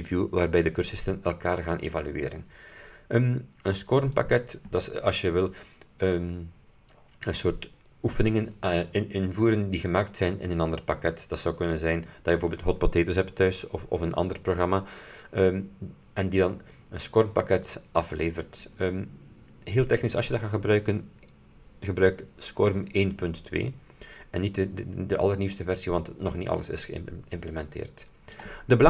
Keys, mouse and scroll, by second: 4.2 click, 28.4 click.